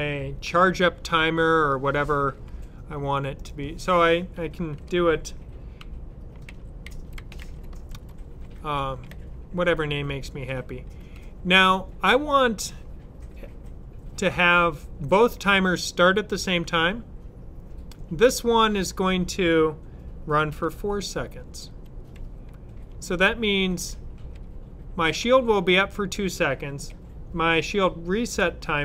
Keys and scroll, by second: 6.1-8.3 typing, 20.3-24.1 typing.